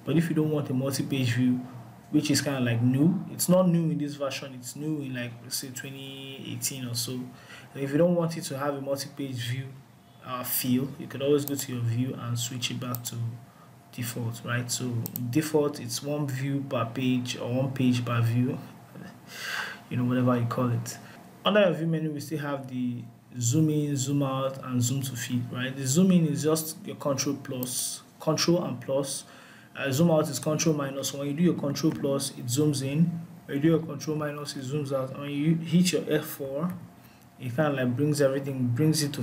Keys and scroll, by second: 31.4 ctrl+=, 32.1 ctrl+=, 33.2 ctrl+-, 36.2 F4.